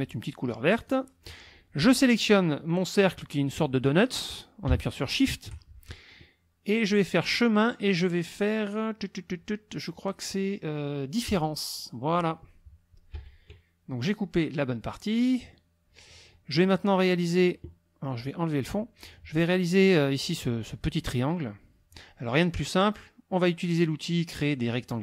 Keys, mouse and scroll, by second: 0.8 click, 5.0 shift+click, 7.0 click, 11.3 click, 13.1 KP_Subtract, 14.4 click, 15.4 click, 18.6 click.